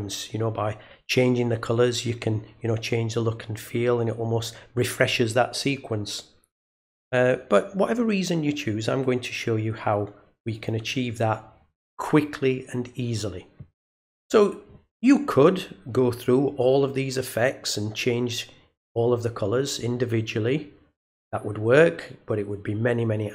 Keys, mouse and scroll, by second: 10.5 click.